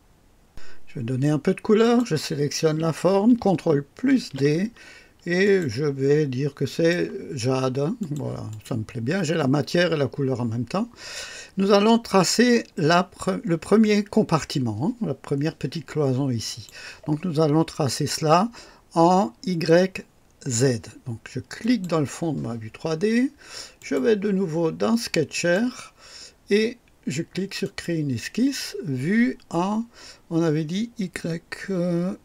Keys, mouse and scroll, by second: 1.8 click, 4.1 ctrl+d, 5.4 click, 6.6 click, 7.9 click, 8.4 click, 16.4 click, 21.6 click, 23.7 click, 25.3 click, 27.6 click.